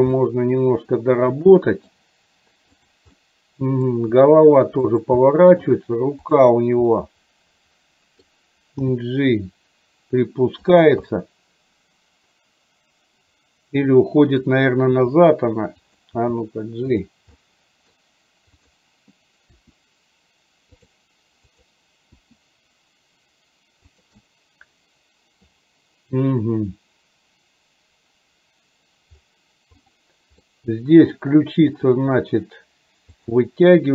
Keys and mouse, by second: 0.2-2.0 middle drag, 3.3 middle click, 4.3 r, 5.4 middle click, 7.0-8.3 middle drag, 8.9 g, 11.1-14.5 middle drag, 15.1 r, 16.1 g, 17.5 middle click, 19.5 r, 21.5 click, 22.3 r, 24.1-25.6 middle drag, 29.9 click, 30.5 middle click, 31.7 r.